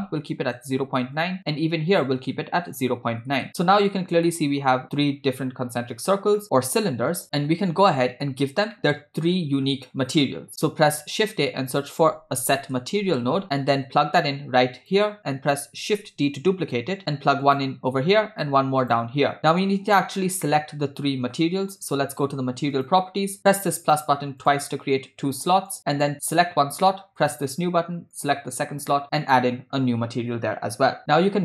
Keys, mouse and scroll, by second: 1.9-3.4 drag, 3.9-4.2 scroll up 1, 4.3 middle click, 6.4 middle click, 8.8 middle click, 9.4-9.8 scroll down 2, 10.1 click, 11.1 shift+a, 16.6 d, 18.1 shift+d, 19.3 click, 20.2-21.4 middle drag, 22.8 click, 23.8 click, 24.4 click, 25.7 click, 27.2-27.8 drag, 28.2 click, 29.2 click.